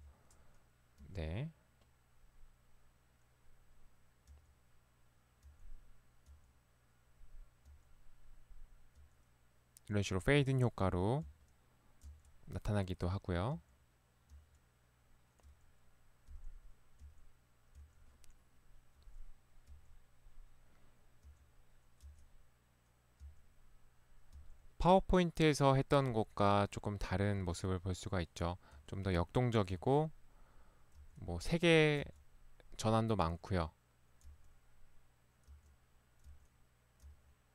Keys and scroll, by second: 1.0 Right, 4.4 Right, 5.5 Right, 6.4 Right, 7.7 Right, 9.1 Right, 10.4 Right, 11.3 Right, 12.1 Right, 13.6 Right, 14.4 Right, 15.4 Right, 16.3 Right, 17.0 Right, 18.3 Right, 18.9 Right, 19.8 Right, 21.2 Right, 22.1 Right, 23.3 Right, 24.4 Right, 26.2 Right, 27.4 Right, 28.7 Right, 29.8 Right, 30.9 Right, 32.1 Right, 34.3 Right, 35.6 Right, 36.3 Right, 37.2 Right.